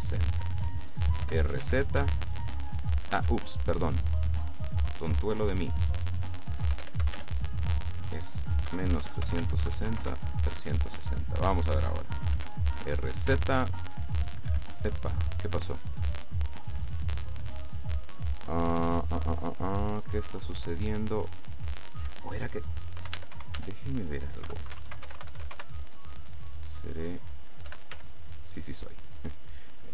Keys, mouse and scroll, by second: 0.3 right click, 1.3 r, 1.7 z, 3.2 Escape, 4.3 right click, 5.3 click, 6.7 KP_0, 6.8 Tab, 7.1 KP_0, 7.2 Tab, 8.7 KP_Subtract, 9.0-9.9 typing, 9.4 Tab, 10.1 KP_Enter, 11.4 right click, 12.4 r, 13.4 z, 14.6 Escape, 15.5 right click, 21.6 click, 23.1 KP_0, 23.2 Tab, 23.4 KP_0, 23.7 Tab, 24.5 KP_Subtract, 24.7-25.5 typing, 25.1 Tab, 25.6 KP_Enter, 27.0 right click, 27.7 r, 28.0 z.